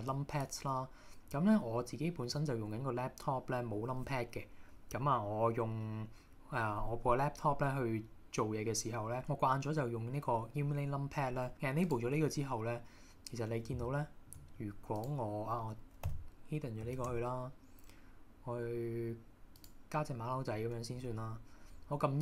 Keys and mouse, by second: 11.9 click, 13.9 shift+middle click, 15.0 click, 16.1 h, 17.0 shift+a, 20.6 middle click, 21.0 KP_1.